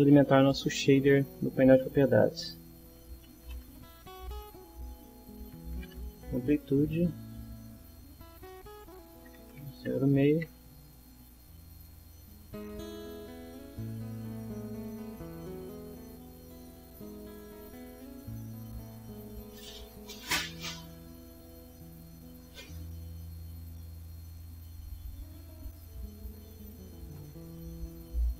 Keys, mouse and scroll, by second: 2.7-6.3 typing, 6.9 Return, 8.4 click, 9.0-10.2 typing, 10.3 Return, 11.6 click, 13.2-15.2 drag, 17.5-18.5 drag, 19.3 click, 20.8 click, 22.5 click, 23.7-24.9 drag, 26.1 click.